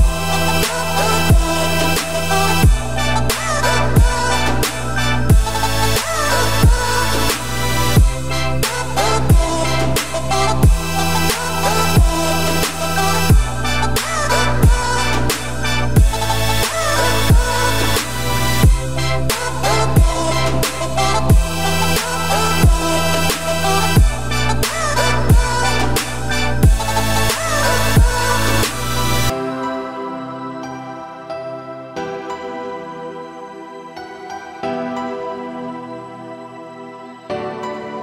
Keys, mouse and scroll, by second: 0.4 z, 0.9 click, 2.3 ctrl+click, 3.1-3.5 scroll up 2, 3.5-4.0 middle drag, 4.0 z, 4.4 scroll up 6, 4.8 middle drag, 5.1-6.3 scroll up 3, 6.4 click, 7.4-10.2 drag, 10.2 scroll down 3, 10.4-11.7 middle drag, 11.7 click, 13.3 scroll down 4, 13.6-15.5 middle drag, 15.5 click, 16.4 click, 16.9-17.2 middle drag, 17.2 scroll up 4, 17.6-18.6 middle drag, 18.6 ctrl+l, 20.1 scroll down 3, 20.3-21.9 middle drag, 21.9-22.3 scroll up 2, 22.6 `, 23.3 `, 24.0 scroll up 2, 24.5 scroll down 1, 24.8 g, 28.3 g, 29.9 scroll down 3, 30.1-33.3 middle drag, 33.3 click, 33.7 scroll down 2, 33.9-34.6 middle drag, 34.6 `, 35.3 scroll down 1, 35.4-36.0 scroll up 3, 36.0 ctrl+z, 37.1 `, 37.6-38.0 scroll up 8, 37.9 shift+middle click.